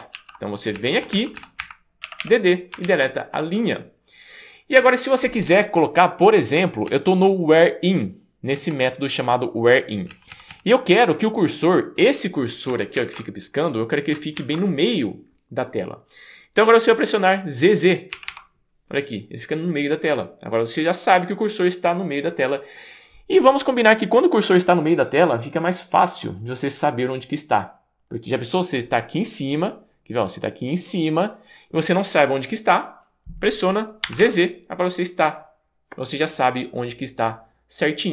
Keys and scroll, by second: 0.2 super+w, 0.8 Down, 1.0 Down, 1.1 Down, 1.4 Down, 1.6 Up, 2.0 d, 2.2 d, 2.9 super+z, 4.8 Up, 5.3 Up, 5.4 Up, 5.4 Up, 5.5 Up, 5.6-6.2 Up, 6.3 Up, 6.4 Up, 6.4 Up, 6.9 Down, 7.4 Down, 7.4 Down, 7.8 Down, 7.9 Down, 7.9 Down, 8.5 Down, 10.1 Down, 10.3 Down, 10.5 Down, 18.2 z, 18.3 z, 34.1 z, 34.2 z.